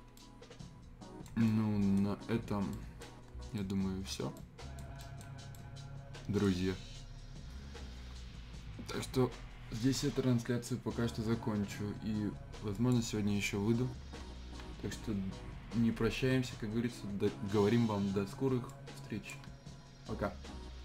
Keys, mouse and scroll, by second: 0.4-2.2 right drag, 2.2 scroll down 1, 2.4 scroll up 1, 2.7 right click, 3.1 scroll down 1, 3.3 scroll up 1, 3.5-6.7 right drag, 6.7-8.0 scroll up 1, 12.7 click, 18.7-20.8 drag.